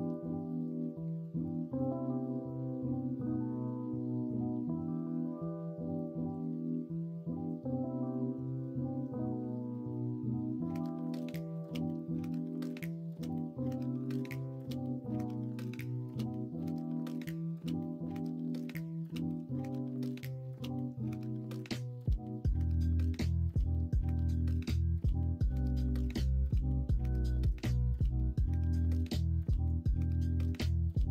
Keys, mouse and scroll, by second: 1.2 e, 3.8-7.6 drag, 7.6 middle click, 8.8 middle click, 9.2 middle click, 9.7 middle click, 10.4-13.0 middle drag, 14.1 Tab, 16.0 Tab, 16.4 Tab, 17.6 Tab, 18.5 l, 19.3 p, 20.1 Tab, 21.5-31.1 drag.